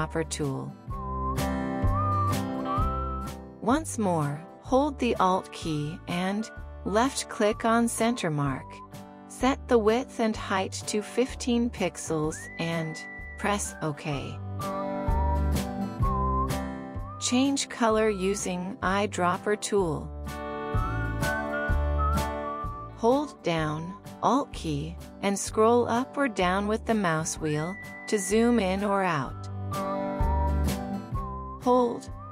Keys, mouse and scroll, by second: 8.6 alt+click, 11.3-14.4 typing, 12.0 Tab, 12.7-13.0 Tab, 16.7 typing, 27.8-28.4 alt+scroll up 1, 28.8-29.5 alt+scroll down 1, 29.5 alt+scroll up 1, 30.9-31.5 alt+scroll down 1.